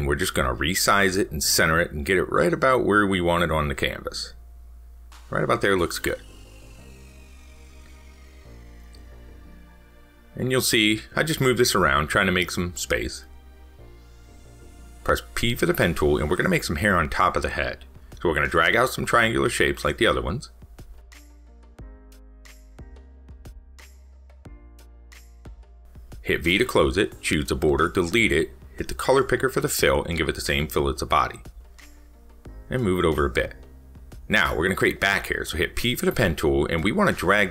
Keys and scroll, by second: 22.1 ctrl+z.